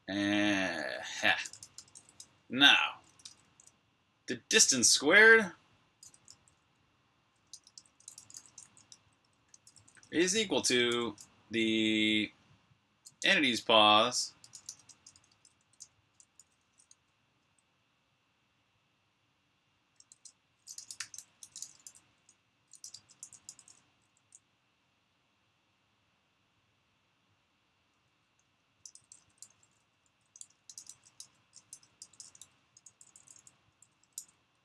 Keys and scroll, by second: 1.2-3.4 typing, 6.1-9.5 typing, 10.7 (, 13.0 Escape, 13.1-17.2 typing, 19.9-24.5 typing, 27.5-33.1 typing.